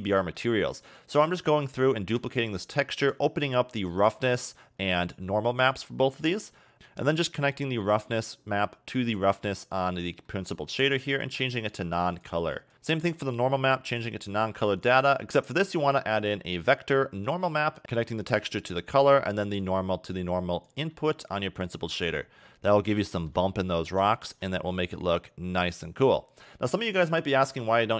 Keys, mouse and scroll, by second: 0.2 middle click, 0.7 click, 1.6 shift+d, 3.0 click, 9.6 middle click, 10.3 middle click, 11.2 click, 12.7 click, 13.9 click, 15.3 shift+a, 18.2 click, 19.6 click, 20.9 middle click, 22.2 scroll up 2, 23.1 shift+middle click, 23.9 scroll down 1, 24.2 shift+middle click, 27.0 click, 27.3 1.